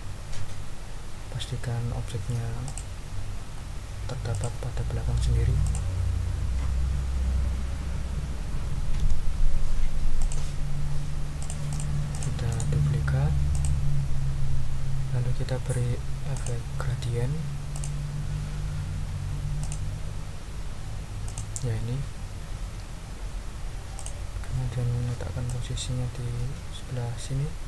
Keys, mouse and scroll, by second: 2.6 click, 4.3 click, 5.6 click, 9.0 d, 10.2 click, 11.4 click, 12.1 click, 12.5 right click, 13.5 click, 16.3 click, 17.7 click, 19.6 click, 21.2 click, 23.9 click, 25.4-27.6 drag.